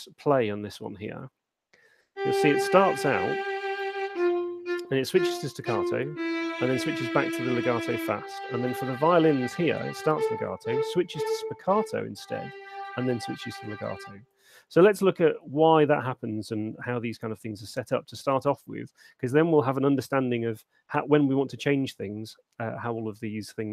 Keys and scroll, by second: 1.1 alt+shift+space, 15.0 space.